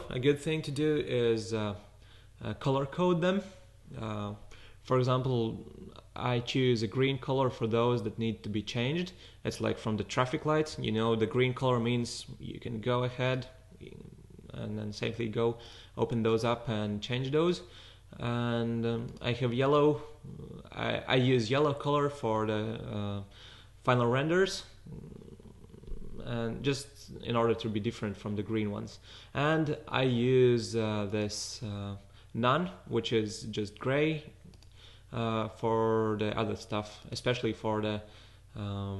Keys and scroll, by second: 0.0 0.